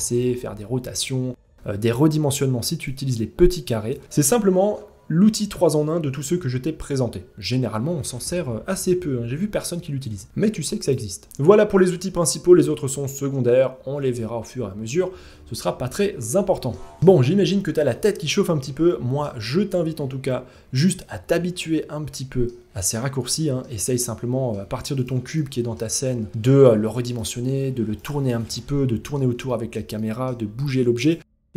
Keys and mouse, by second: 2.4-3.5 drag, 3.6 ctrl+z, 15.4-16.3 middle drag, 16.6 middle click, 17.4-18.8 middle drag, 20.8-22.0 middle drag, 22.8-23.2 shift+middle drag, 23.4-24.0 middle drag, 24.9-25.3 middle drag, 25.6 shift+middle drag, 26.1 middle click, 26.2 s, 27.0 r, 28.0-28.7 middle drag, 29.0 shift+middle drag, 29.5 middle drag, 30.3 g, 30.9-31.3 middle drag.